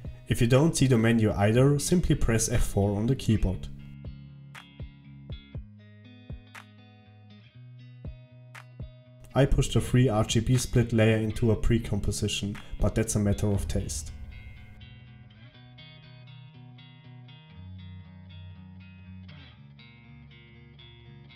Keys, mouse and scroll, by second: 0.0 F4.